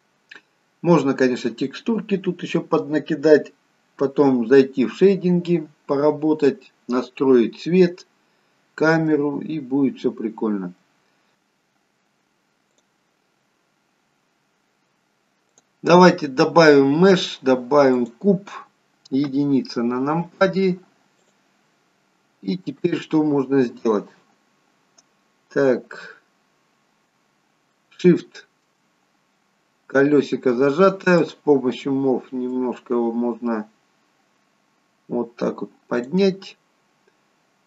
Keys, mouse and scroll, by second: 0.5-2.1 scroll down 2, 8.2-9.2 scroll down 1, 9.2 middle click, 9.2-9.9 scroll down 1.